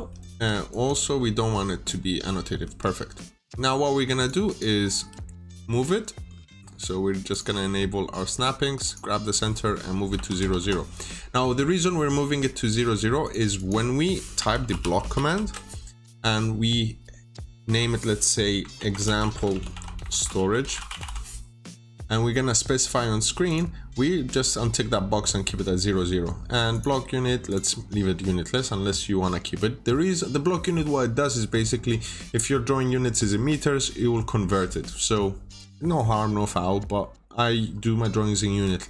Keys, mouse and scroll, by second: 0.2 Escape, 0.6 click, 2.5 Escape, 3.0 scroll down 1, 4.1 click, 4.4 double click, 4.6-5.4 typing, 7.2 click, 9.6-10.6 typing, 11.2 scroll up 1, 12.1 middle click, 12.2-12.7 scroll down 1, 13.1 click, 13.5 double click, 14.0-15.5 typing, 18.4-21.5 typing, 23.4 click.